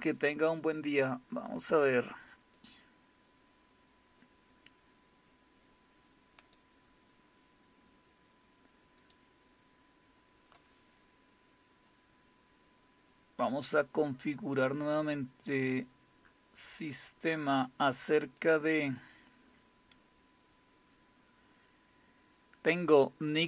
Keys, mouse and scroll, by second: 1.6 click, 2.6 click, 6.4 click, 9.0 click, 14.2-14.7 scroll down 2, 14.7-15.7 scroll down 1, 15.7-16.3 scroll down 1, 16.3-17.8 scroll down 2, 18.4 click.